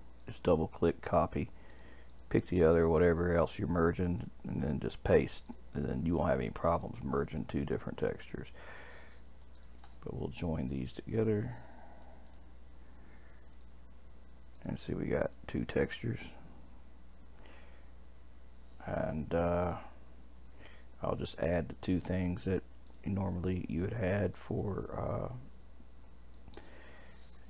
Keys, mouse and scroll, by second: 0.2 click, 0.3-1.8 drag, 2.1 click, 4.0 click, 4.2-5.5 drag, 6.7 click, 7.3 shift+click, 8.0 click, 9.5 shift+click, 10.7-13.6 drag, 14.5 click, 15.2 click, 15.6 click, 19.6-22.6 drag, 22.9-25.9 drag, 26.3 click, 26.6-27.4 drag.